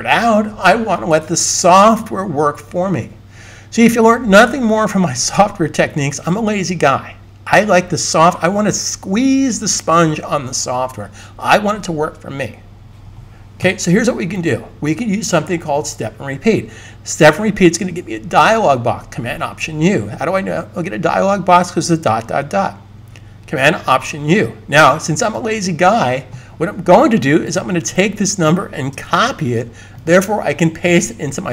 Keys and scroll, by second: 29.0 super+c.